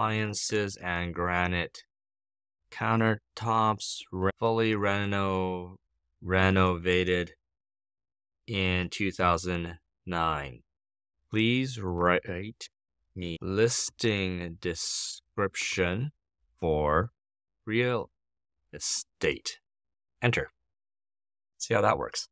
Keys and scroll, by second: 0.0-19.4 typing, 19.9 Return.